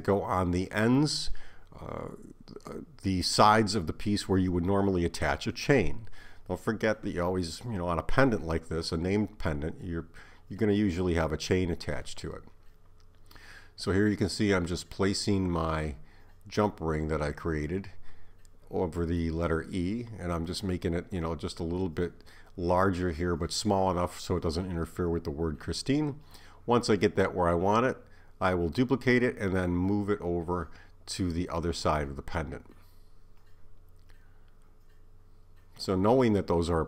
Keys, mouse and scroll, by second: 1.8 click, 6.8 s, 9.5 click, 11.7 KP_7, 13.5 click, 16.0 click, 18.4 s, 20.7 s, 24.2 click, 26.4 shift+d, 27.9 click, 30.5 Escape, 31.7 click, 32.6 click.